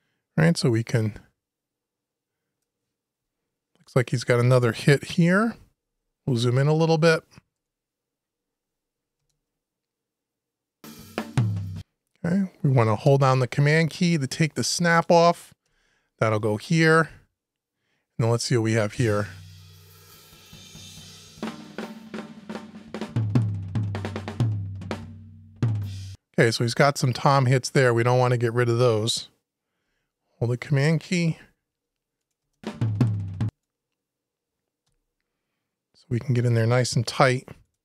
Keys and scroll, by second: 3.0 Delete, 15.4 super+Delete, 31.1 super+Delete, 31.7 Delete, 36.9 super+Delete, 37.4 Delete.